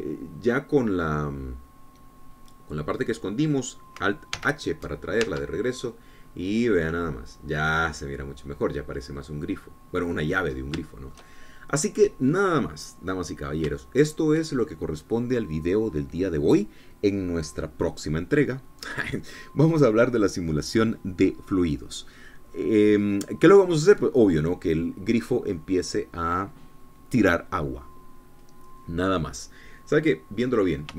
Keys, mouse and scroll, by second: 0.0-5.5 middle drag, 5.9 alt+h, 6.8 alt+Tab, 7.7-8.1 scroll down 2, 8.1-12.0 middle drag, 12.0-12.4 scroll up 3, 12.4-13.5 shift+middle drag, 13.6 scroll down 2, 14.2 middle click, 14.9 scroll down 2, 15.3 shift+middle click.